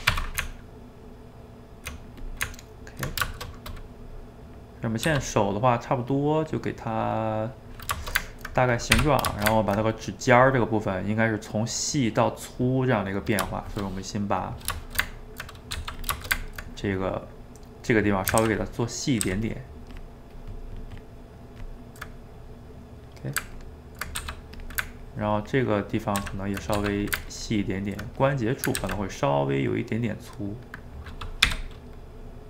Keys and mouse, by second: 0.4 Tab, 2.3 click, 2.4 Tab, 3.3 shift+middle click, 4.2 click, 4.7 middle click, 5.0 f, 5.6-6.8 drag, 6.8 middle click, 7.5 click, 7.9-9.1 shift+middle drag, 9.1 d, 9.4-13.0 ctrl+shift+middle drag, 13.5 shift+middle click, 14.4 click, 14.9 ctrl+shift+middle click, 15.7 f, 16.2-17.9 ctrl+shift+middle drag, 17.9 click, 18.5 ctrl+z, 18.6 ctrl+click, 19.3 ctrl+z, 19.4-22.1 ctrl+drag, 22.1-23.5 middle drag, 23.5 ctrl+click, 24.2 f, 25.1-26.2 ctrl+drag, 26.2 ctrl+z, 26.7 f, 27.3-28.8 ctrl+drag, 28.8 ctrl+z, 29.1 click, 29.7-31.5 middle drag, 31.5 g, 32.2-32.4 drag.